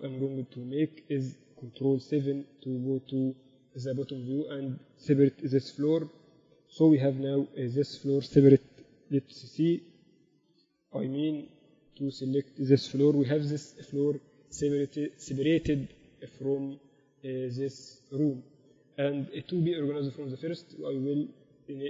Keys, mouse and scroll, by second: 0.4 Tab, 1.6-3.3 drag, 2.3 ctrl+KP_7, 2.7 z, 3.2 a, 4.4 z, 5.0-6.7 right drag, 5.9 p, 7.3 Tab, 7.6-8.0 KP_8, 8.2 KP_8, 8.4 KP_8, 9.7 g, 11.0 z, 11.7 z, 12.9 middle click, 13.6 g, 13.8 middle click, 21.0-21.8 drag.